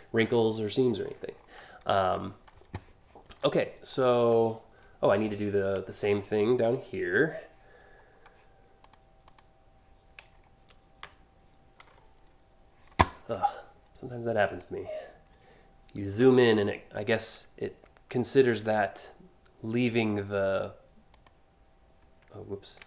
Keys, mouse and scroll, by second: 0.3 click, 0.6 scroll up 1, 1.0 click, 1.9 click, 3.0 alt+scroll down 2, 3.5 alt+click, 4.8 scroll down 2, 5.5-6.0 alt+scroll up 2, 7.7 scroll down 1, 8.4 click, 8.8 click, 9.9 alt+scroll up 1, 11.4 p, 14.0 click, 15.7 p, 20.7 click, 22.4 ctrl+z.